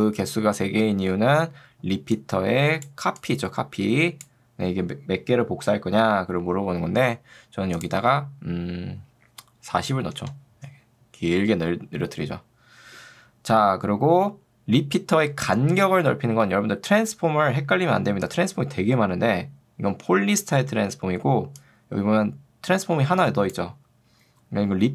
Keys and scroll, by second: 5.9 Escape, 9.9 0, 10.3 Return, 17.1 ctrl+2.